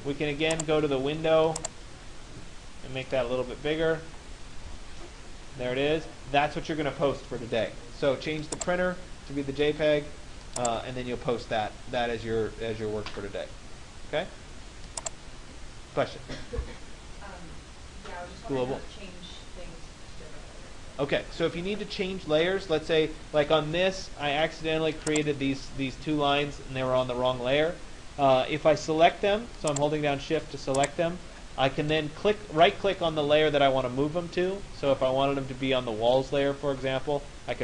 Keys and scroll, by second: 4.3 Return.